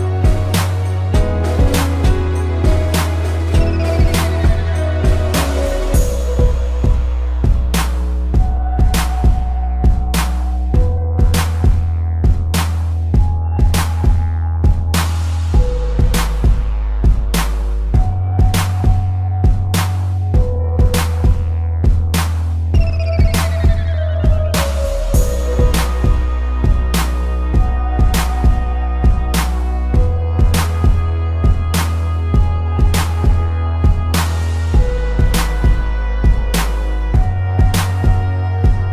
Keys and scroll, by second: 1.1 ctrl+z, 1.8 space, 6.9 ctrl+z, 8.0 space, 9.9 space, 12.0 space, 13.3 space, 15.4 space, 16.6 ctrl+-, 17.8 space, 18.7 p, 29.6 space, 30.3 z, 30.8 p, 31.1 space, 34.8 space.